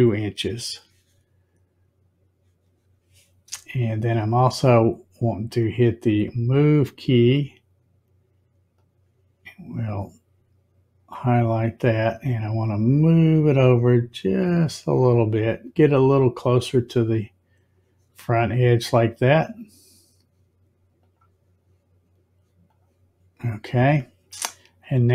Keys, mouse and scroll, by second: 6.1 click, 8.7-11.1 drag, 13.0 click, 19.3 click, 20.9 click, 22.6 click.